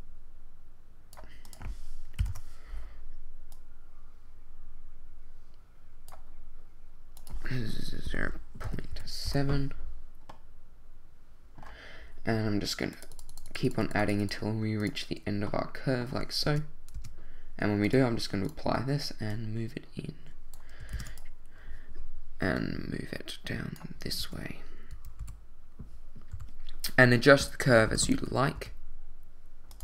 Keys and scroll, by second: 2.2 0, 2.3 Return, 8.0 0, 8.6 ., 8.9 7, 9.3 Return, 16.5 Tab, 20.9 shift+d, 24.2 l, 25.2 2, 27.3 l, 27.9 r, 28.1 x, 28.5 z.